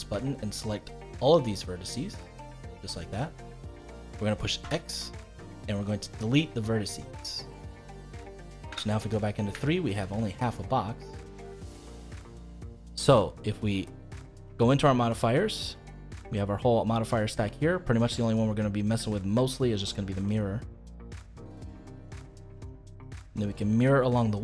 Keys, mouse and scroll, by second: 1.5-4.6 middle drag, 4.6 x, 7.7 middle click, 8.6 KP_3, 9.6-12.6 shift+middle drag, 14.3 click, 15.7-18.9 drag, 21.9 click, 22.5 click, 23.0 click, 23.8-24.4 middle drag.